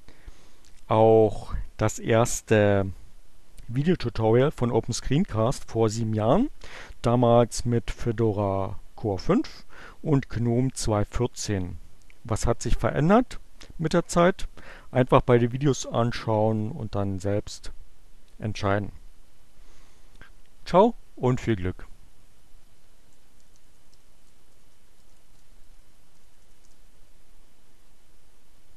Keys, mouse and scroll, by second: 21.4 click, 22.0-26.5 typing, 26.6 Return.